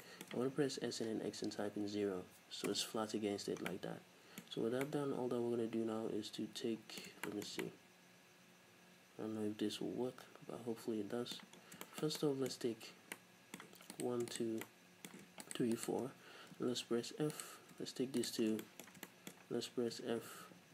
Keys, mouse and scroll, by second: 0.6 s, 3.3 Return, 3.8 middle click, 4.6-4.9 scroll up 1, 5.4 middle click, 6.8-14.3 middle drag, 11.7 scroll down 2, 12.9 scroll up 2, 14.4 shift+right click, 14.7 middle click, 15.5 shift+right click, 15.8 shift+right click, 16.7 f, 17.4 right click, 18.3 shift+right click, 18.5 scroll down 2, 18.7-20.7 shift+middle drag, 20.1 f.